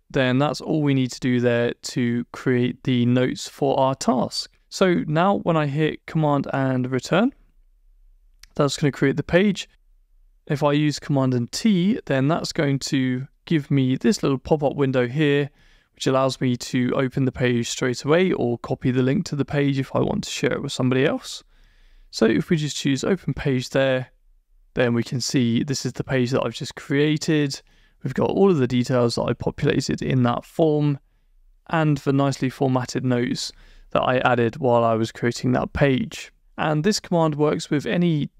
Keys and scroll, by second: 6.5 super+Return, 18.1 Down, 19.3 Up, 22.8 Return.